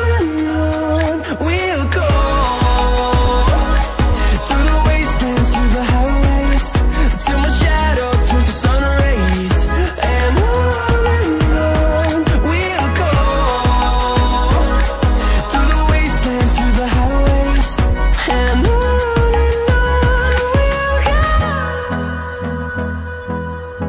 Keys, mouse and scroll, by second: 1.6 scroll down 1, 2.3 scroll up 1, 3.7 click, 4.8 scroll down 1, 5.6 right click, 6.3 click, 7.4-9.3 scroll up 1, 9.4 click, 11.5 ctrl+s, 13.4 click, 18.5 click.